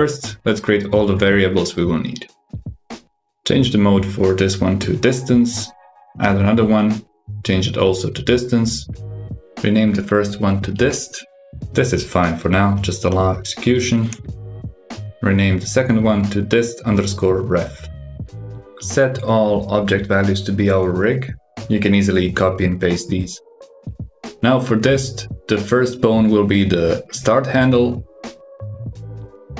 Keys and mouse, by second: 2.9-4.1 drag, 5.5 click, 6.7-7.9 drag, 9.3-13.1 drag, 14.4-17.4 drag, 19.5 click, 21.5 ctrl+c, 22.1 ctrl+v, 22.8 ctrl+v, 23.6 ctrl+v, 25.3-28.9 drag.